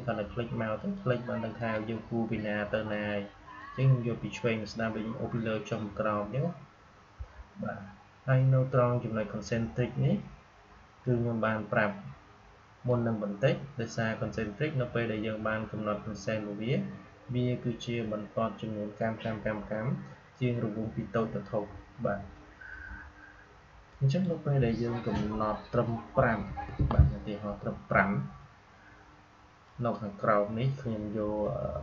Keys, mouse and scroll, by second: 10.9-15.1 drag, 23.8-29.6 drag.